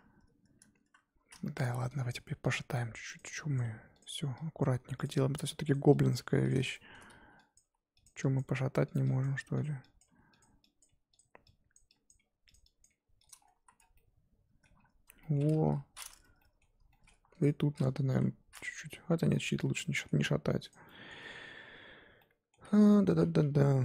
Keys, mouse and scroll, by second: 1.0 scroll up 1, 1.3 z, 1.4 shift+middle click, 2.1 click, 2.2 g, 2.9 g, 3.5 click, 3.6 g, 4.6 click, 4.7 g, 5.3 click, 5.4 g, 6.1 click, 6.2 g, 6.7 shift+middle click, 7.5 click, 7.6-10.8 typing, 8.3 click, 9.2 click, 10.0 click, 10.8 click, 11.7 click, 12.1 click, 12.2 g, 12.8 click, 12.9 g, 13.4-13.9 scroll down 7, 13.5 z, 13.9 middle click, 14.7-15.2 scroll up 4, 15.2 middle click, 15.6 KP_1, 16.4 middle click, 17.2 Tab, 17.3 click, 17.7-18.1 scroll down 4, 18.1 KP_1, 18.6 scroll up 4, 18.9 Tab, 19.3-19.6 scroll down 4, 19.6 Tab, 19.8 middle click, 20.3 scroll up 2, 20.7 click, 20.9 middle click, 21.2 Tab, 22.2-23.4 middle drag, 23.4 KP_3.